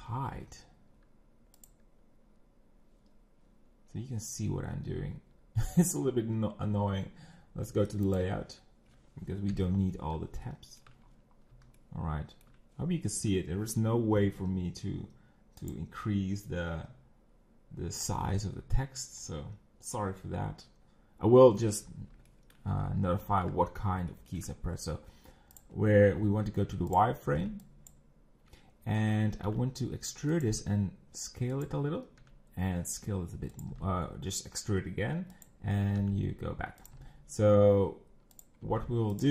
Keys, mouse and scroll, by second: 0.0 t, 1.5 click, 8.1 click, 9.5 KP_1, 10.5 shift+middle click, 11.0-11.4 scroll up 6, 11.8-14.7 shift+middle drag, 14.7 n, 17.8 click, 22.3 shift+middle click, 22.7 scroll up 5, 23.2 shift+middle click, 23.6-24.1 scroll up 4, 24.1 shift+middle click, 24.5 scroll up 3, 25.6 click, 26.2 z, 26.9 click, 27.9 b, 29.4 e, 30.6 s, 32.2 e, 33.8 s, 36.1 e, 36.9 g, 38.6 s.